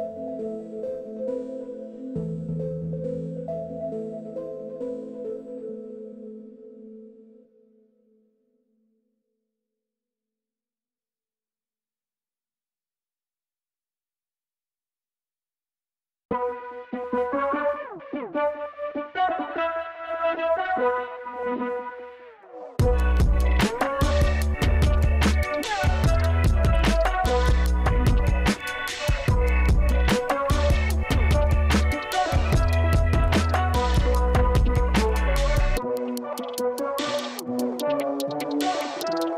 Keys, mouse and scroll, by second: 4.0 click, 5.7 click, 6.7 KP_5, 7.0 Return, 8.8 click, 11.3 click, 12.1 click, 18.0 click, 20.5 click, 27.3 click, 30.4 click, 31.9-33.1 super+drag, 33.5 super+click, 34.5 super+click, 39.2 super+click.